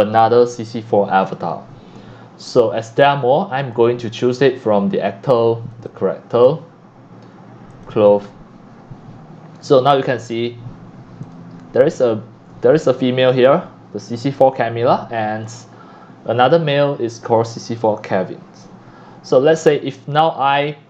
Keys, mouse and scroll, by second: 3.7 click, 5.7 click, 7.7 click, 9.6 click, 10.3 click, 10.8 click, 13.0-13.5 scroll up 1, 15.5 click, 16.2-18.7 drag, 20.1 click.